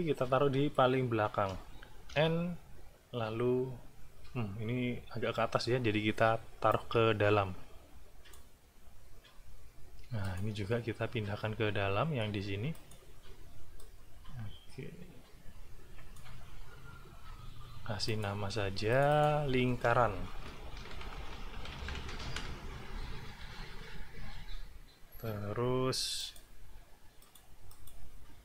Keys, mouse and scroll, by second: 0.1 click, 0.1 right click, 2.1 End, 6.7-8.5 drag, 10.2 click, 12.7 click, 13.8-16.3 drag, 18.1 click, 18.9 click, 20.5-22.6 typing, 26.2 click, 27.2 click, 27.7 click.